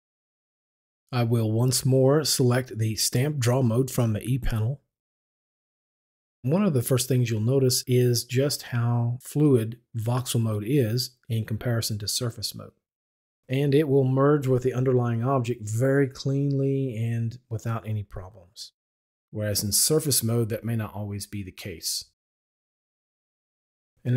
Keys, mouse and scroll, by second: 3.6 click, 5.3-23.9 drag, 23.8 Escape.